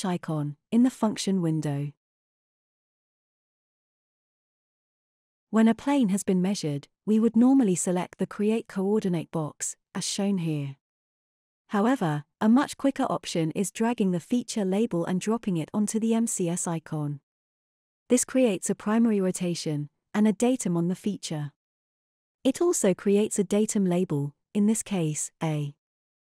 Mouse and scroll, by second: 1.4 click, 14.6-17.6 drag.